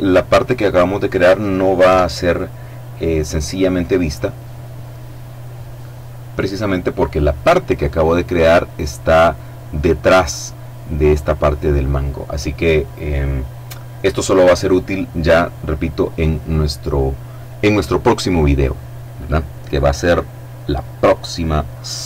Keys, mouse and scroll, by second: 0.8 F12.